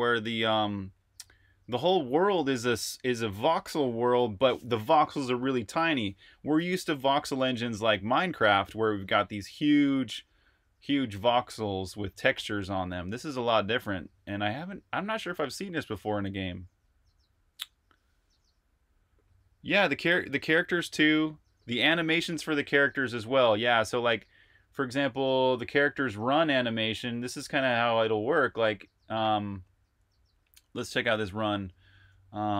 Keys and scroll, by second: 22.6 super+Tab.